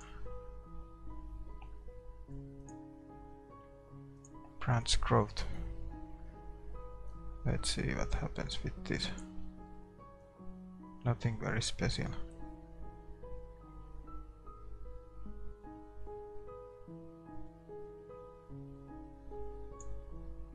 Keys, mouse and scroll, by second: 10.6-12.3 drag.